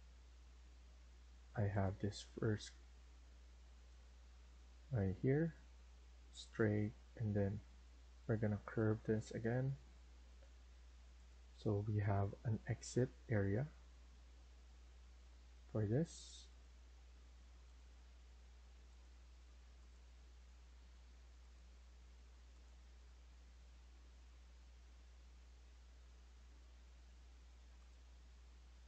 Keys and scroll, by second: 2.4 Escape, 15.7 Escape.